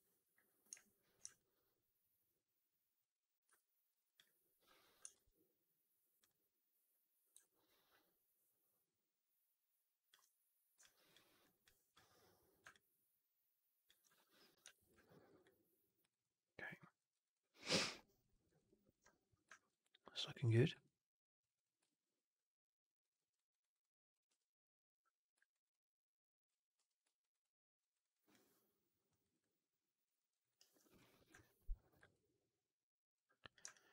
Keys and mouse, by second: 1.2-2.9 alt+drag, 3.7 2, 3.8 click, 3.9 click, 5.0 shift+Tab, 7.3-10.0 drag, 10.7 alt+click, 11.3 alt+right click, 11.5 alt+click, 12.6-13.7 alt+drag, 14.9 4, 14.9 alt+right click, 15.1 right click, 15.3 click, 15.9 right click, 16.1 click, 16.8 alt+click, 17.2 alt+click, 17.6 alt+right click, 17.8 alt+click, 18.2 alt+middle drag, 18.3 alt+right click, 18.5 alt+drag, 19.4 alt+middle click, 19.6 alt+right click, 20.3 click, 20.7 alt+click, 21.4 click, 23.0 alt+middle click, 23.2 alt+right click, 23.5 alt+right click, 23.7 alt+click, 24.5 2, 25.4 alt+right click, 25.6 click, 27.0 4, 27.0 alt+drag, 27.3-27.7 drag, 27.8 drag, 28.0 right drag, 28.2-28.9 drag, 29.1 alt+right drag, 29.2-29.9 alt+drag, 30.0 alt+middle drag, 30.2 alt+right drag, 30.3 alt+right click, 33.6-33.9 alt+drag.